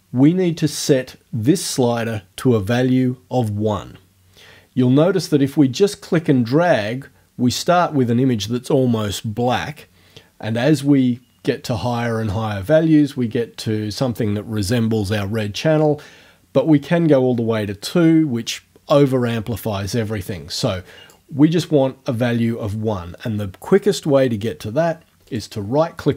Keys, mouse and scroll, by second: 5.8-21.3 drag, 25.3 right click.